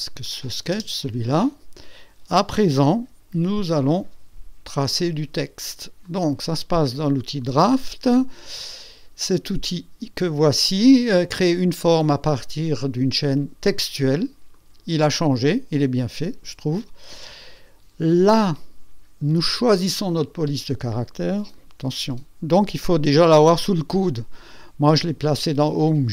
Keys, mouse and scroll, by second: 0.2 click, 0.7 space, 1.0 space, 1.2-2.0 drag, 2.8 KP_1, 3.3 KP_2, 4.0 KP_2, 6.0 click, 7.4 click, 14.5 click, 19.4 click, 19.9 click, 21.1-21.7 scroll down 3.